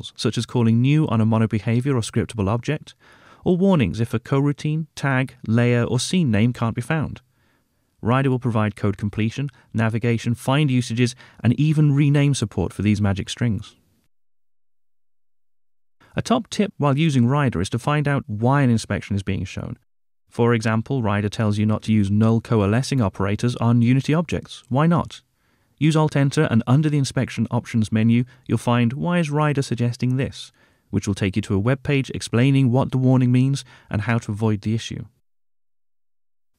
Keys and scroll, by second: 0.6 Tab, 1.6 ctrl+Tab, 4.5 Tab, 9.5 super+b, 11.3 shift+F6, 18.4 alt+Return, 24.3 alt+Return.